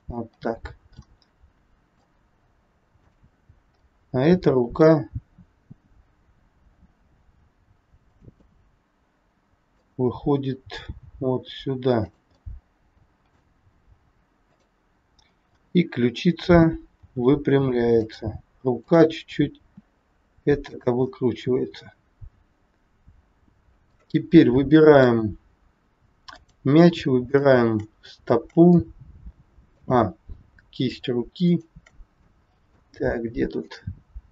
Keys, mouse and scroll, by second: 0.9 middle click, 2.9 click, 3.8 middle click, 6.6 r, 8.4 middle click, 10.7 g, 12.4 middle click, 14.3 click, 15.2-15.6 scroll down 3, 15.6 middle click, 17.0 r, 18.7 click, 19.4 r, 21.1 middle click, 24.3 scroll up 1, 24.4 middle click, 25.4-25.8 scroll up 2, 26.3 click, 27.3 shift+click, 28.7 middle click, 31.5 shift+click, 32.2 scroll up 1, 32.3 middle click, 33.5 shift+click.